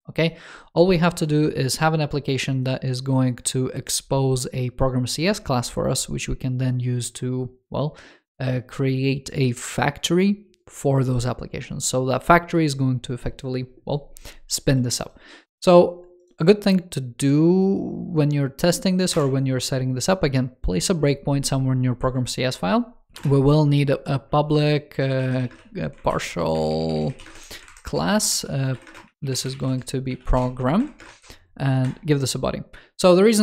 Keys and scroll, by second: 26.0 alt+Left, 27.6 alt+Right.